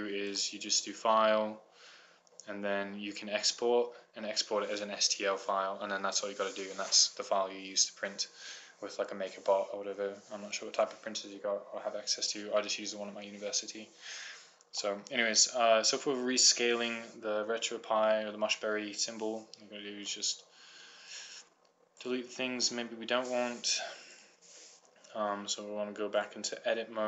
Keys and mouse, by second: 15.1 middle click, 17.9 click, 20.4 Delete, 23.1 click, 24.1 click.